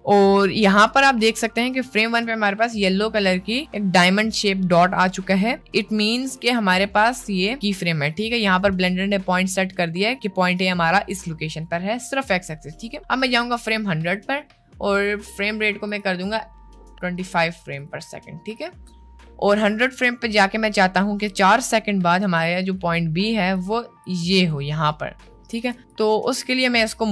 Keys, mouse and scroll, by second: 1.3 click, 2.1 middle click, 2.9 middle click, 5.8 middle click, 8.1 middle click, 10.5 middle click, 13.1 click, 15.0 click, 15.9 click, 16.7 click, 17.1 click, 18.6 click, 19.9 drag, 22.4 click, 23.6 click, 24.1 click, 25.8 ctrl+z, 25.9 click.